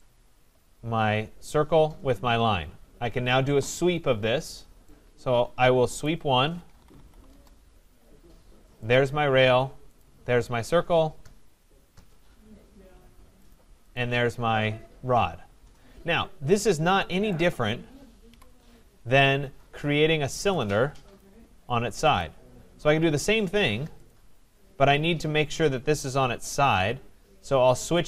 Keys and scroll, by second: 7.3 Return, 18.2 Delete.